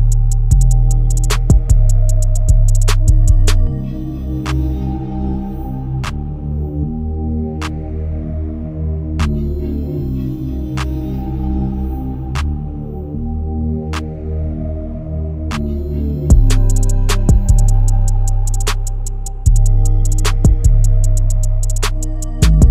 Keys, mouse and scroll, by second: 0.9 scroll down 1, 1.0 scroll up 1, 1.3 click, 2.4 right click, 2.6 click, 2.9-3.4 scroll up 1, 3.4 click, 3.6-3.9 scroll up 1, 3.9 click, 5.0-5.4 scroll down 1, 5.4 Left, 5.8-6.2 scroll down 1, 6.2 click, 6.6 Right, 7.2 click, 7.4-8.0 scroll down 1, 8.0-10.2 drag, 10.4-11.3 scroll up 1, 11.3 click, 11.5 scroll up 1, 11.7 click, 12.6 Caps_Lock, 12.8-14.2 typing, 15.8-20.1 typing, 17.9 Return, 20.6 click.